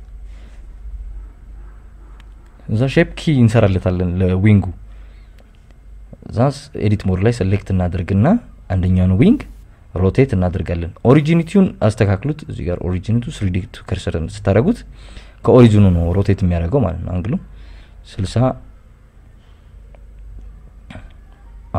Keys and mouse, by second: 0.1 click, 0.6 Escape, 0.8 KP_1, 2.0 Tab, 6.5 Tab, 7.5 click, 8.0 click, 9.2 Tab, 10.1 click, 10.8 click, 11.6 ctrl+KP_Add, 11.8 ctrl+KP_Add, 12.6-13.2 KP_Add, 13.7 r, 14.5 Escape, 15.2-15.9 drag, 16.4 r, 18.3 KP_Subtract, 18.6 KP_6, 18.8 KP_0, 19.0 KP_Enter, 19.8 KP_Subtract, 19.9 KP_Subtract, 20.1 KP_1, 20.6 click, 21.2 ctrl+KP_Add, 21.5 ctrl+KP_Add.